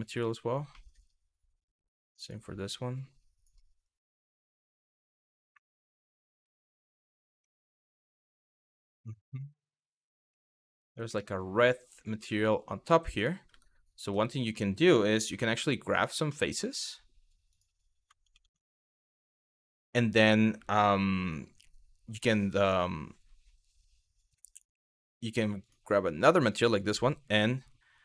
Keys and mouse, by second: 0.5 middle drag, 1.0 click, 1.9-3.2 drag, 3.5 click, 6.1 shift+middle click, 6.5 shift+middle drag, 7.2 shift+middle drag, 7.6-9.7 middle drag, 10.1 shift+middle click, 10.8 shift+middle click, 12.0 shift+middle click, 13.2 Tab, 14.2 shift+middle click, 15.0 Tab, 17.2 click, 18.0 ctrl+z, 25.3-26.2 drag.